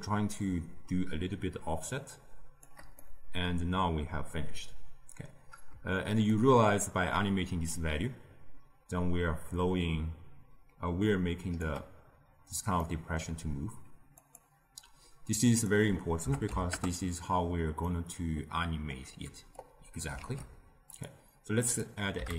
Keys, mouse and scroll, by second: 3.0-5.7 middle drag, 6.3-9.4 shift+drag, 12.7-14.1 middle drag, 14.1-17.2 drag, 17.8-19.5 middle drag, 19.5 click, 20.1 shift+d, 21.6-22.3 drag.